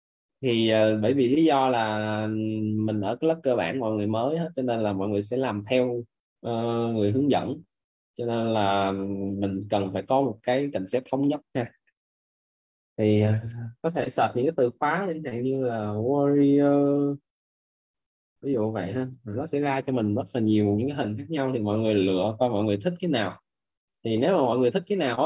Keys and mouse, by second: 17.5 w, 18.4 a, 19.3 i, 19.9 o, 20.6 Return.